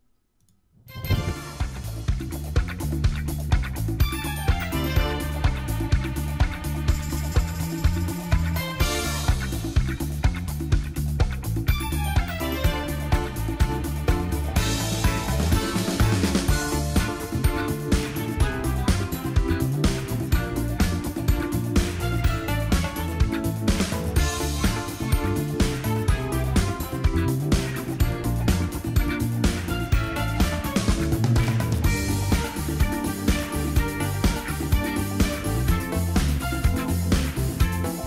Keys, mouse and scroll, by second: 11.4 super+e.